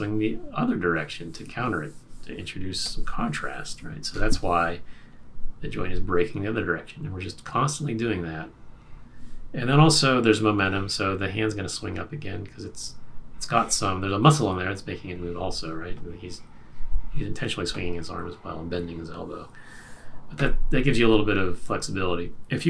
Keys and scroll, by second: 4.1 BackSpace.